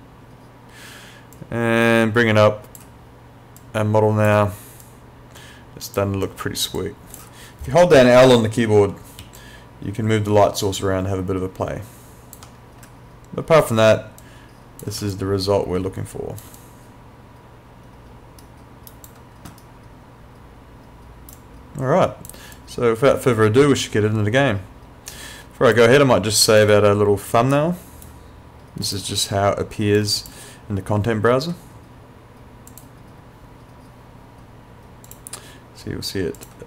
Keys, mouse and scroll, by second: 1.4 click, 9.2 l, 9.4 click, 12.4 l, 13.6 click, 15.0 l, 15.2 click, 16.4 l, 16.6 click, 18.4 right click, 19.6 right click, 21.4 click, 26.4 click, 26.7 right click, 28.9 click, 32.7 click.